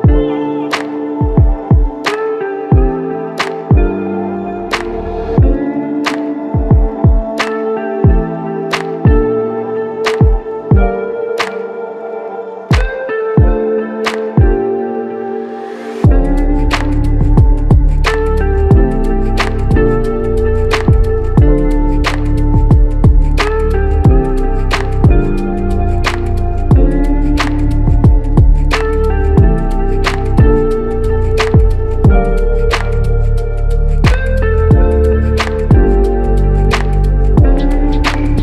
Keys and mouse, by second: 3.0 alt+click, 5.1 alt+click, 10.7 alt+click, 13.1 alt+click, 13.9 double click, 15.8 alt+click, 16.4 alt+click, 17.5 alt+shift+click, 18.1 alt+click, 20.0 double click, 24.9 alt+click, 29.8 double click, 35.7 alt+click.